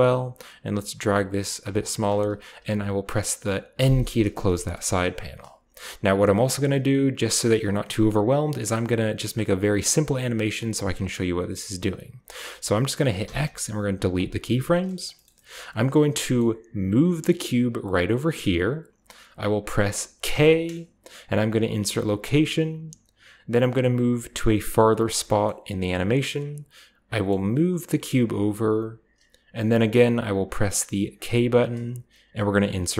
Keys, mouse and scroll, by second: 1.3 click, 3.6 n, 4.2 scroll up 2, 4.4-5.8 shift+middle drag, 13.1 x, 14.0 click, 14.4 middle click, 14.4-16.0 scroll down 1, 14.7-15.4 shift+middle drag, 16.0 shift+scroll down 1, 16.7 g, 18.2 click, 20.1 k, 22.0 click, 22.2 typing, 23.6-24.8 drag, 25.5 click, 26.9 typing, 29.3 click, 31.1 k.